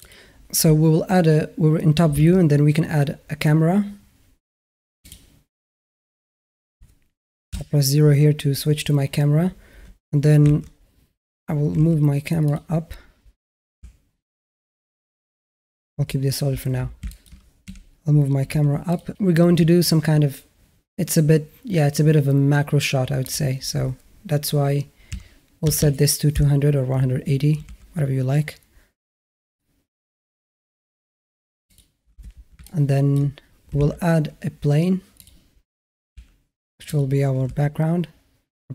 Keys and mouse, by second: 2.1 shift+a, 7.3 KP_0, 10.3 alt+q, 11.5 g, 13.6 z, 16.9 shift+a, 16.9 shift+drag, 17.1 shift+a, 17.5 n, 18.2 g, 23.1-26.2 drag, 25.6 KP_0, 27.4 g, 32.5-33.0 middle drag, 33.7 shift+a, 35.9 s, 37.2 g.